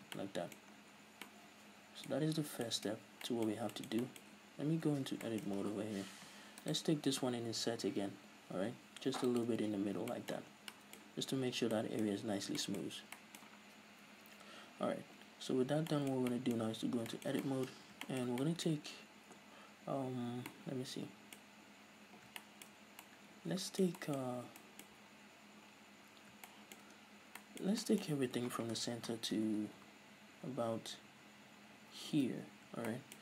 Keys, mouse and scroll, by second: 0.1 scroll down 2, 0.8-1.4 scroll down 2, 2.2 scroll up 1, 3.0 scroll up 1, 4.7 scroll up 2, 4.9 Tab, 5.7 z, 5.9-6.7 scroll up 2, 6.7 alt+right click, 9.5 shift+click, 9.7 z, 10.0 scroll down 1, 10.2-33.2 middle drag, 10.5 Tab, 10.6 scroll down 1, 11.6 scroll down 2, 12.1-13.2 scroll up 4, 15.4-16.0 scroll up 2, 16.8 Tab, 17.8-18.2 scroll up 2, 21.6-22.3 scroll up 2, 22.3 scroll up 1, 22.8 scroll up 2, 27.1 scroll down 2, 29.2 ctrl+KP_Add.